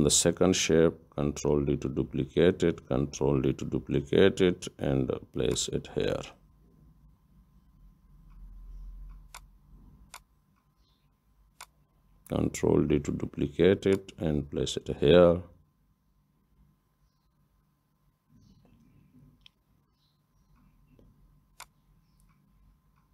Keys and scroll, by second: 1.5 ctrl+d, 4.0 ctrl+d, 12.6 ctrl+d, 20.2 ctrl+d.